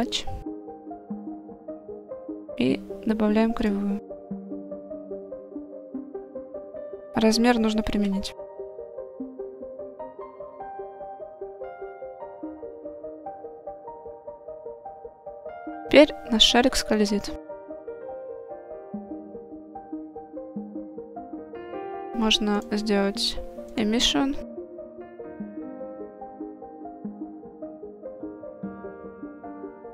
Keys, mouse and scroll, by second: 2.2-3.8 drag, 4.5-5.6 middle drag, 6.3 click, 8.0 ctrl+a, 10.3-11.1 middle drag, 11.3 shift+middle click, 11.7-12.5 middle drag, 13.1 click, 15.0-19.4 drag, 20.5 click, 21.6 click, 22.6-24.0 drag, 25.3 click, 28.2-29.7 drag, 29.2 0.